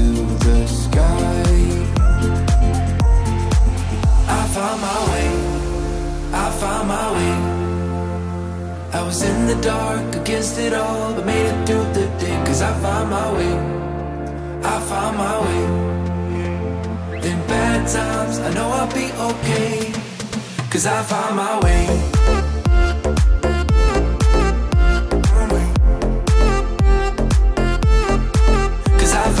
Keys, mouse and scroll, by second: 4.5-7.5 drag, 5.9 typing, 10.2-13.1 drag, 11.5 typing, 14.2-20.0 drag, 18.4 typing, 19.0 Return, 20.0-20.9 typing, 20.1 click, 20.2 click, 22.8 6, 23.1 Return, 24.7-26.2 drag.